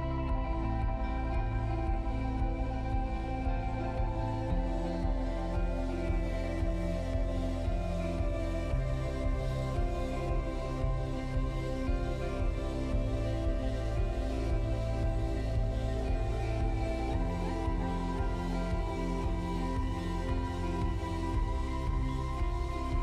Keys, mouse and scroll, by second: 1.4 click, 6.4 click, 9.0 click, 10.6 click.